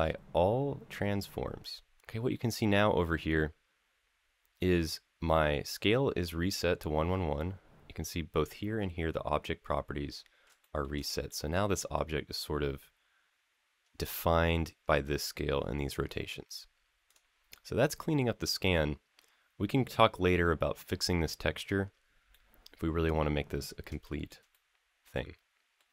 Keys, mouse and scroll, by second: 2.3 click, 10.4 shift+middle drag, 10.8 click, 11.0-11.7 middle drag, 11.9 scroll down 1, 12.1-13.5 scroll up 1, 16.8 click, 17.3-20.0 middle drag, 22.1-23.5 middle drag, 23.8 shift+middle drag, 24.3-25.5 middle drag, 25.8 click.